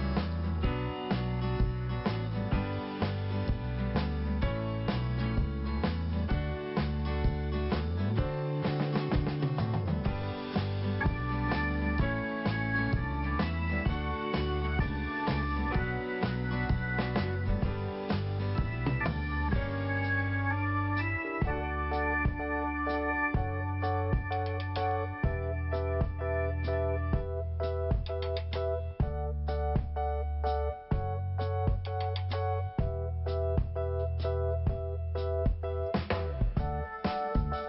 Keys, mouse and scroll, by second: 1.1 click, 2.2 click, 3.5-3.8 scroll down 1, 4.1 scroll up 1, 5.1 click, 9.3 click, 12.5 click, 13.3 click, 13.3 click, 14.2 click, 15.2 click, 20.0 scroll down 1, 20.9 scroll up 1, 23.8 click, 25.8 click, 27.1 click, 28.0 scroll up 1, 28.5 click, 32.0 click, 32.1 click, 33.0 click, 34.4 click, 36.3 click.